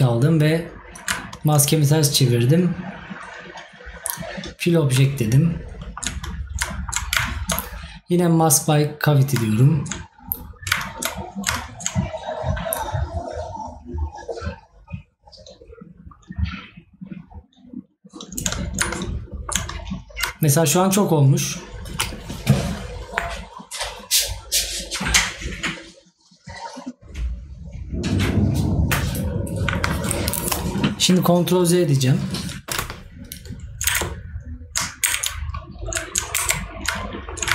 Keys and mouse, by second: 6.7 right click, 19.3 right click, 37.0 right click.